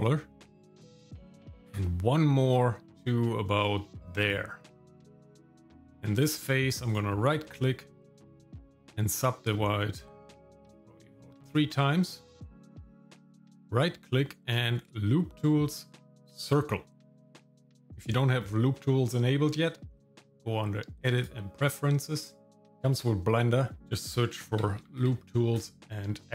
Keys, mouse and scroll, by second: 4.9 shift+middle click, 5.6 shift+middle click, 6.3 scroll up 1, 6.9-8.9 right drag, 10.5 click, 13.0-19.9 right drag, 19.9-21.3 drag.